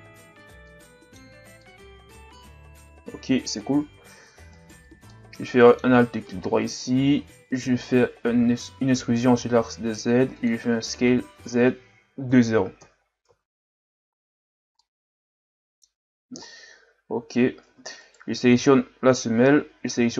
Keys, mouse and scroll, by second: 0.2 Tab, 0.7-1.3 middle drag, 1.3 a, 1.6-3.3 middle drag, 3.3-3.7 scroll up 1, 3.7 Tab, 4.6 alt+right click, 5.1-6.3 middle drag, 6.3-8.4 scroll up 4, 8.4 e, 10.9 s, 13.3 Tab, 14.5 scroll down 2, 14.8-16.0 middle drag, 16.0-16.4 scroll up 2, 16.4-16.7 shift+scroll down 3, 16.7-17.1 scroll up 1, 17.1 Tab, 17.7 Tab, 18.0 right click, 18.4 Tab, 19.7 a, 20.0 a.